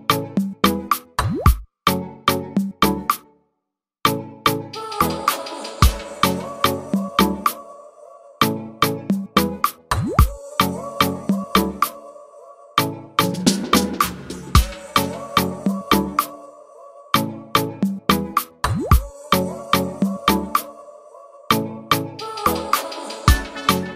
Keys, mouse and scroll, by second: 0.7 ctrl+z, 1.2 click, 7.5 click, 8.4 ctrl+z, 8.9 ctrl+z, 9.8-11.7 drag, 14.7 click, 16.5 click, 17.5 click, 18.6 click, 19.5 click, 21.7 click.